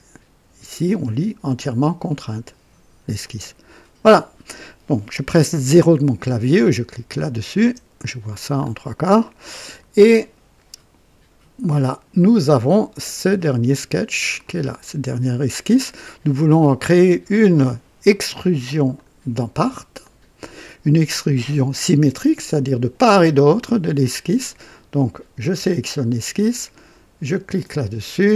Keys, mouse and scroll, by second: 3.2 click, 7.1 click, 7.6 KP_0, 8.6-8.9 scroll up 2, 9.2 right click, 14.4 click, 18.9 click, 20.0 click, 27.4 click.